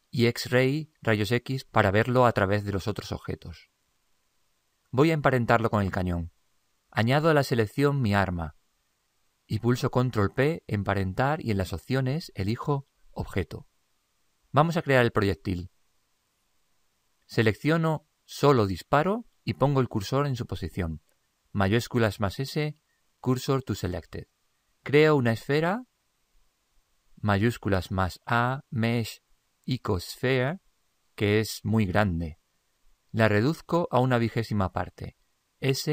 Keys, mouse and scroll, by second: 8.7-10.5 right drag, 10.7 ctrl+p, 19.0-20.8 right drag, 21.6 shift+s, 26.2 shift+a, 35.8 s.